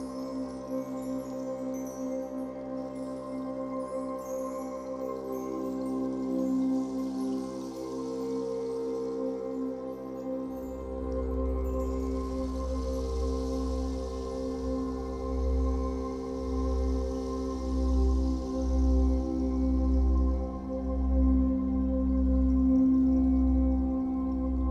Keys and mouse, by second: 1.2 alt+click, 1.7 ctrl+alt+click, 3.3 alt+click, 5.9 click, 6.5 click, 7.6-11.6 drag, 12.7-16.5 ctrl+alt+drag, 17.1-18.8 typing, 18.5-21.9 ctrl+alt+drag, 20.5-22.1 typing.